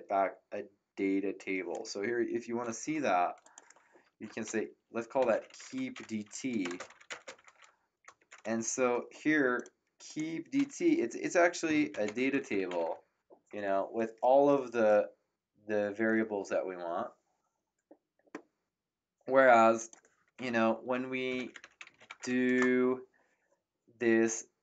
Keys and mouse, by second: 2.8 ctrl+x, 3.4 click, 4.2 Return, 4.9-7.0 typing, 7.3 ctrl+v, 8.1 ctrl+Return, 9.5 click, 11.6-13.2 typing, 19.7 click, 21.0-22.5 typing.